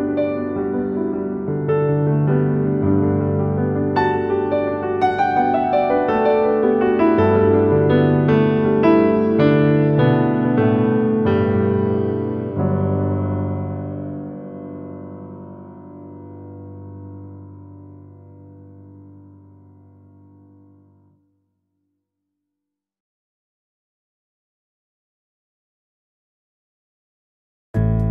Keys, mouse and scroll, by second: 3.6 Tab, 5.1 alt+z, 5.7-6.8 scroll down 7, 6.8-8.7 shift+middle drag, 8.7-9.2 scroll down 3, 9.2-10.1 shift+middle drag, 10.1-10.9 scroll up 7, 10.9-11.9 shift+middle drag, 11.9-12.5 scroll up 3, 12.5-13.3 shift+middle drag, 13.3 Tab, 13.8-14.8 scroll up 4, 14.8-17.7 shift+middle drag, 17.7 alt+click, 19.5 click, 21.2 ctrl+b, 25.3 Tab, 26.4-28.1 right drag.